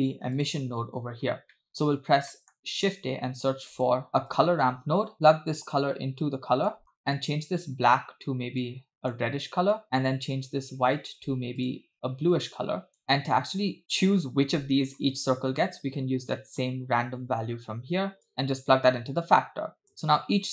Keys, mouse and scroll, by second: 0.4 click, 1.2-1.5 scroll down 2, 1.6 middle click, 2.0-2.3 scroll down 2, 2.3 middle click, 2.9 shift+a, 5.1-5.6 scroll up 2, 5.7-6.8 drag, 6.8 middle click, 7.0 scroll up 1, 7.2 click, 11.0 click, 11.6 click, 15.6-16.4 scroll down 4, 16.4 middle click, 18.3-19.9 drag.